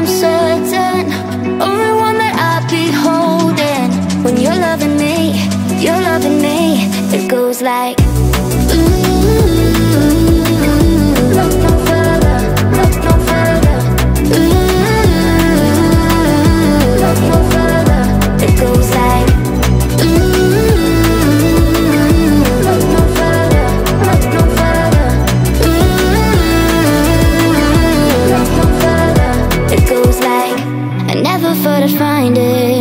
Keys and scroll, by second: 0.1-1.1 typing.